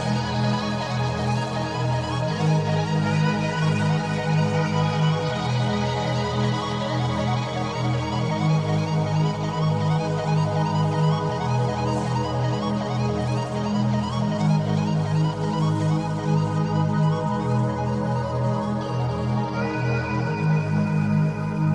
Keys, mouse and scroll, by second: 1.3 click, 1.9 click, 6.0 click, 7.9-8.9 drag, 10.5-11.8 drag, 13.2 click, 15.6 g, 16.8 click, 19.9 click, 21.3 g.